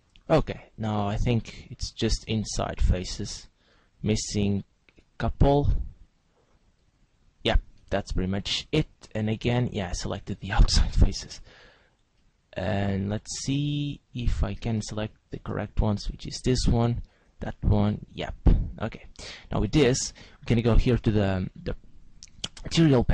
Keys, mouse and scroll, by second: 0.0 shift+right click, 0.3 middle click, 5.4 shift+right click, 6.1 shift+right click, 6.8 shift+right click, 7.4 shift+right click, 7.9 middle click, 10.1 shift+right click, 10.6 shift+right click, 11.1 middle click, 12.2 middle click, 16.1 shift+right click, 17.1 shift+right click, 17.4 middle click, 19.1-22.7 scroll down 5.